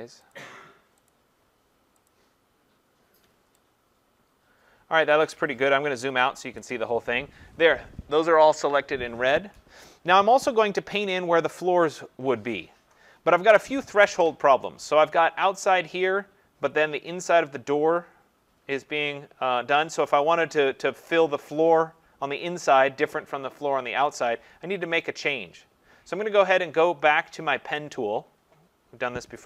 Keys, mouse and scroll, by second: 0.3 click, 1.1 click, 1.1 scroll, 2.1 click, 3.2-3.5 scroll, 3.8-5.3 scroll, 5.1 click, 6.1 ctrl+-, 6.5 ctrl+-, 27.9 click.